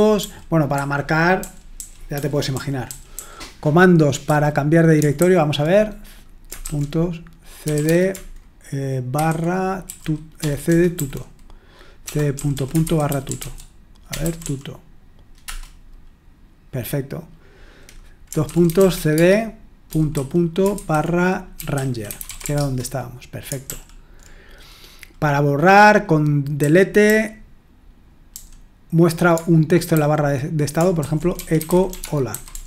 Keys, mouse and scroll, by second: 0.2-3.1 typing, 4.2 typing, 5.2 super+h, 7.4-10.9 typing, 12.0-15.5 typing, 18.4-22.9 typing, 23.7 super+l, 26.6-27.0 typing, 29.9 super+h, 30.8-32.6 typing.